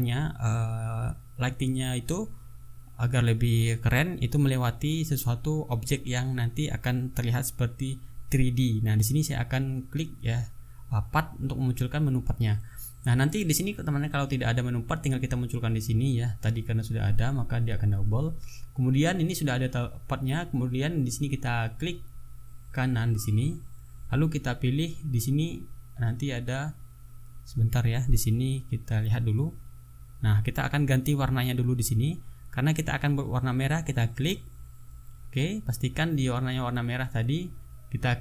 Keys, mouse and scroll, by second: 2.0 click, 4.6 click, 6.0 right click, 6.8 click, 7.5 click, 12.1 click, 13.8 click, 15.4 click, 16.3 click, 19.7 click, 23.1 right click, 24.8 click, 32.2 click, 33.8 click, 34.4 click.